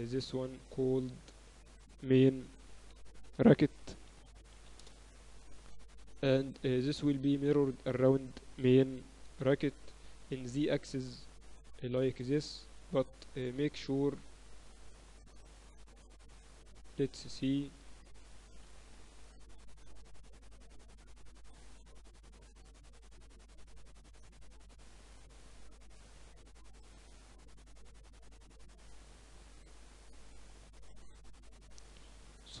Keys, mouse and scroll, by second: 0.2-1.8 right drag, 1.8 middle click, 2.2-4.3 drag, 6.8-9.0 right drag, 7.7-10.9 drag, 11.4-14.2 drag, 13.2 right click, 14.2-15.2 middle drag, 14.3 z, 14.8 z, 17.5-18.4 typing, 19.6 KP_6, 19.8 KP_6, 20.0 KP_6, 22.3-25.3 typing, 26.1 Tab, 26.5 Tab, 26.9 Tab, 28.2-29.7 drag, 29.1 a, 29.7-31.0 middle drag, 29.7 z, 30.4 z, 31.0-32.6 right drag, 31.7 z, 32.0 z.